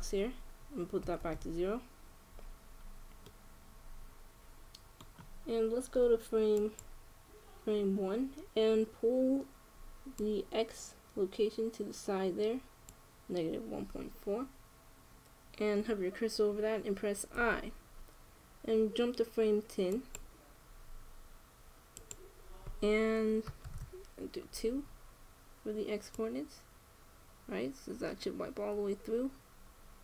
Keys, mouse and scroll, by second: 0.1-1.8 drag, 3.7-5.8 middle drag, 7.5-8.9 drag, 9.1 click, 10.9-12.9 drag, 18.1 i, 20.8-22.2 drag, 21.5 i, 22.7-24.3 drag, 26.9-28.6 drag.